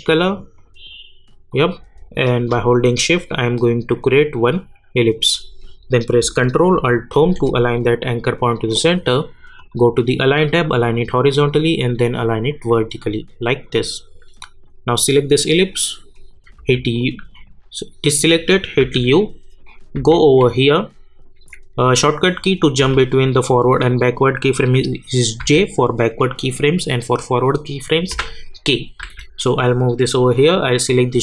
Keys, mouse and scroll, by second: 7.1 ctrl+alt+Home, 9.6 click, 16.6 u, 17.3 click, 18.8 u, 20.0 j, 21.7 scroll down 1, 22.8 k, 25.4 j, 28.3 k, 29.0 j, 29.6 scroll up 1, 30.9 click.